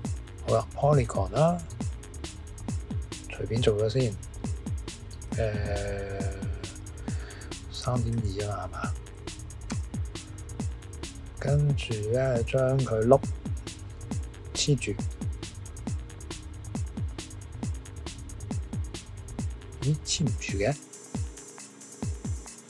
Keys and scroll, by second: 7.6-8.6 typing, 9.7 typing.